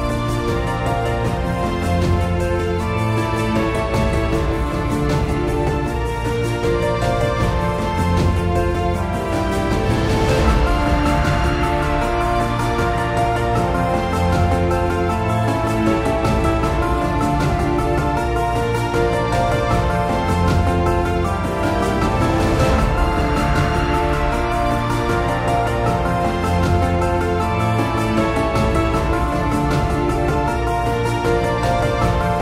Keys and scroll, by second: 29.4 super+z.